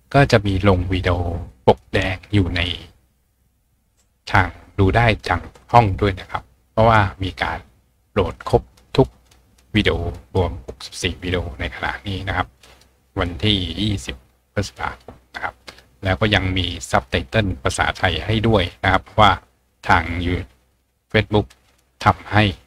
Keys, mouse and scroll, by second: 0.3-0.8 scroll up 1, 8.0-10.4 scroll down 2, 10.4-11.6 scroll down 1, 11.6-13.2 scroll down 1.